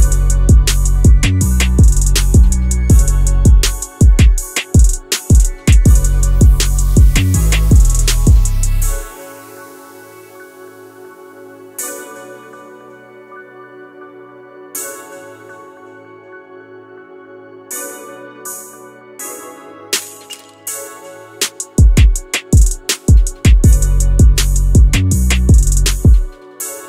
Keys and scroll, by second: 1.9 q, 3.2 w, 7.4 ctrl+d, 9.7 e, 15.6 w, 17.1 q, 22.4 w, 26.1 q.